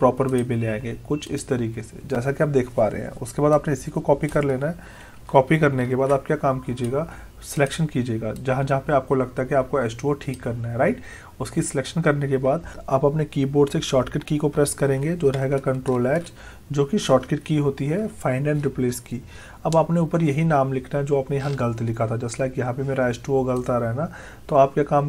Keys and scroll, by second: 5.8 ctrl+c, 15.9 ctrl+h, 17.8 Delete.